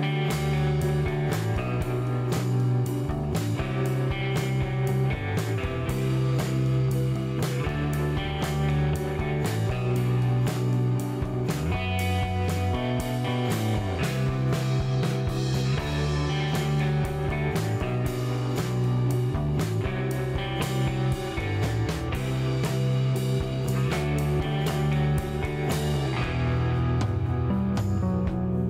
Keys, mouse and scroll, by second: 0.3 middle click, 0.9 click, 1.1 middle click, 1.8 click, 3.1 click, 3.9 click, 4.1-5.1 middle drag, 5.1-5.9 scroll up 1, 5.9 click, 6.3 middle click, 6.7-8.8 drag, 8.0-9.0 middle drag, 9.0-10.5 drag, 10.2-11.5 middle drag, 12.9 middle click, 13.1 scroll up 1, 13.1 middle click, 13.7-15.2 drag, 15.0-16.2 middle drag, 16.4 click, 16.8 middle click, 17.2-17.7 scroll up 1, 17.7 middle click, 17.9-19.7 drag, 18.9-19.9 middle drag, 19.9 scroll down 1, 20.1 middle click, 20.4 click, 20.8 middle click, 21.3-21.7 scroll up 1, 21.7 click, 22.5 middle click, 23.1-25.3 drag, 25.1 middle click, 27.0 click, 27.5 middle click, 28.1 click.